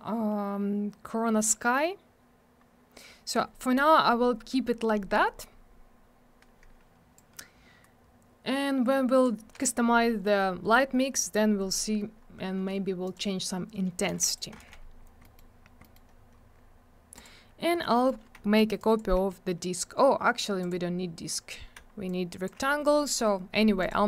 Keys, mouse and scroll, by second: 1.2-1.9 scroll up 1, 1.9-2.6 scroll down 1, 2.6 scroll up 1, 3.1-3.9 scroll down 1, 7.2 click, 13.1 click, 13.1 click, 14.1 alt+w, 14.2 right click, 14.4 right click, 14.6 alt+w, 14.8 scroll down 1, 15.2 middle click, 15.4 middle click, 15.6 scroll down 1, 15.8 middle click, 15.9 middle click, 16.1 scroll up 1, 17.2 click, 17.2 click, 17.7 scroll down 1, 17.9 middle click, 18.1 middle click, 18.8 shift+click, 19.0 shift+click, 20.6 click, 22.1 shift+click, 23.8 click, 23.9 click.